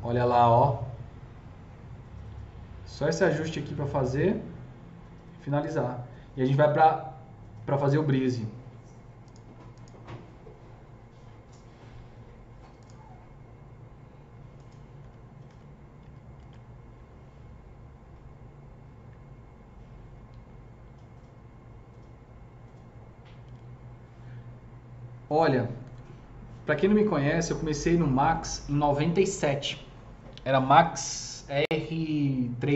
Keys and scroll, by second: 15.0 F2, 15.4 F3, 15.9 F2, 16.3 F3.